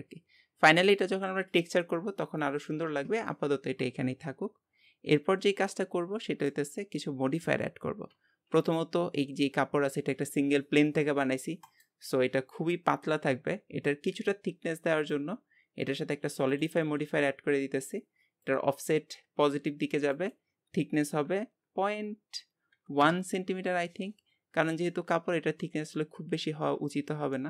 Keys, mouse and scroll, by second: 5.5-5.9 scroll down 3, 5.9-8.4 middle drag, 8.4 scroll up 2, 9.2 g, 17.3-24.0 drag, 25.1 scroll up 3, 25.6 middle click, 26.5 scroll up 2.